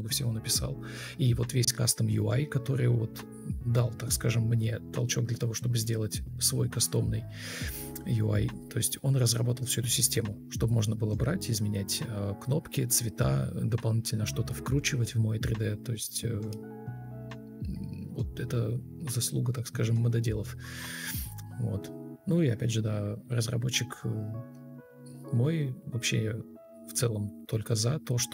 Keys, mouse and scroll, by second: 0.5 ctrl+space, 3.5 Delete, 7.5 Return, 7.8-9.1 typing, 13.1 1, 20.3 r, 24.0 alt+`, 24.9-25.6 typing, 26.0 Escape, 27.2 ctrl+d, 27.3 Delete.